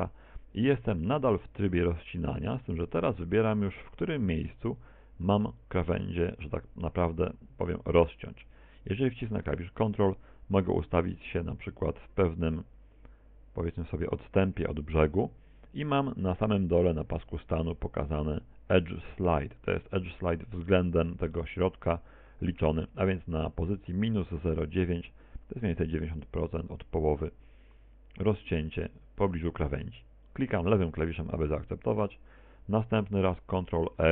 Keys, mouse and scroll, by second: 28.8 ctrl+click, 34.0 ctrl+r.